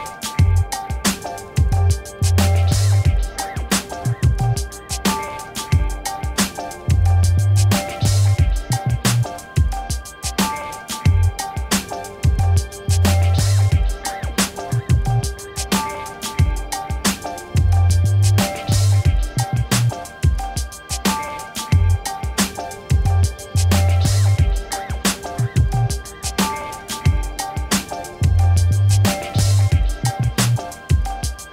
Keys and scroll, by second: 30.9 5.